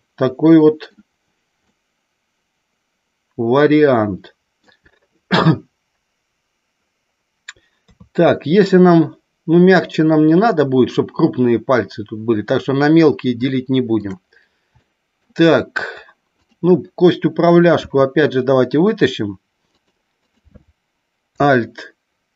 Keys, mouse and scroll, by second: 0.3 middle click, 1.7-4.7 middle drag, 7.8 KP_3, 13.3 shift+middle click, 14.8 shift+middle click, 19.7 click, 20.1 click, 22.2 alt+p.